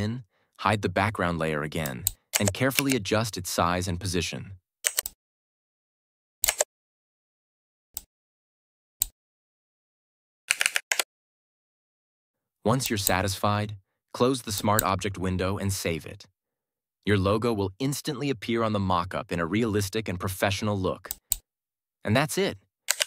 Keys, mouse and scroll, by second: 1.7 click, 2.6 ctrl+t, 4.9-6.5 alt+drag, 10.4 Right, 10.8 Return, 12.7 click, 21.0 click, 22.9 ctrl+-.